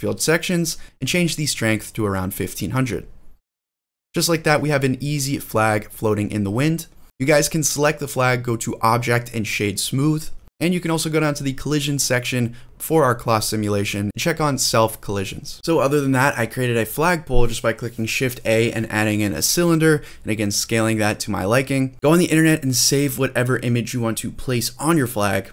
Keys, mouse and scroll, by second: 0.0 shift+middle drag, 0.5 scroll up 2, 1.5-3.8 drag, 2.6 0, 3.9 space, 4.5 scroll down 1, 7.0 space, 7.4-9.0 drag, 9.5 space, 10.8 scroll down 8, 12.7-13.3 scroll down 1, 13.3 click, 14.0 space, 15.6 click, 15.6 scroll down 1, 15.6 g, 15.7 middle drag, 15.7 scroll up 3, 16.1 click, 16.3 middle click, 16.4 scroll up 1, 16.6 middle click, 17.1 click, 17.4 click, 18.0 click, 18.6 click, 18.7 scroll up 2, 18.9 click, 19.2 middle click, 19.8 click, 20.3 scroll down 1, 20.4 scroll up 1, 20.6 middle click, 20.8 click, 20.9 middle click, 21.2 click, 21.3 middle click, 21.3 scroll up 1, 21.7 click, 23.6 click, 24.5 click, 25.4 click.